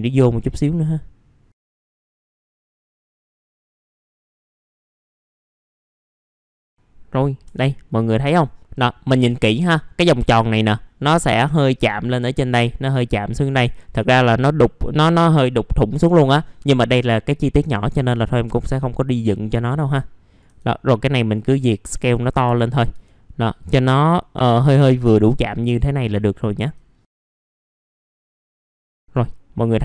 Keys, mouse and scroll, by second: 1.6 click, 1.6 alt+middle click, 1.9 click, 2.9 click, 3.1 middle click, 3.2 ctrl+click, 3.7 click, 5.1 click, 5.7 alt+middle click, 6.0 middle click, 6.3 scroll down 1, 6.4 F4, 6.6 click, 7.2 scroll up 1, 7.4 F3, 7.9 click, 8.2 F3, 8.6 middle click, 9.2 click, 9.9-13.1 scroll up 1, 17.3-19.2 scroll down 1, 19.2-20.4 drag, 20.5 r, 21.0-22.9 drag, 22.9 w, 23.6 click, 26.2 alt+middle click, 27.2 alt+middle click, 27.5 scroll up 1, 27.6 alt+middle click, 27.9 alt+middle click, 28.2 middle click, 28.3 alt+middle click, 28.6 alt+middle click.